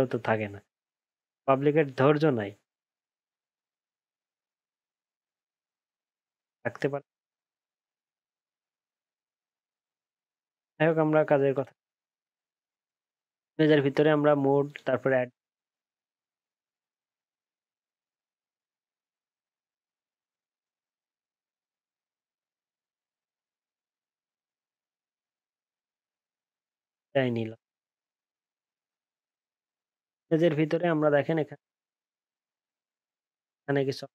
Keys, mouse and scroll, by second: 27.7 alt+scroll up 1, 28.0 alt+scroll down 1, 29.1-29.7 alt+scroll up 4.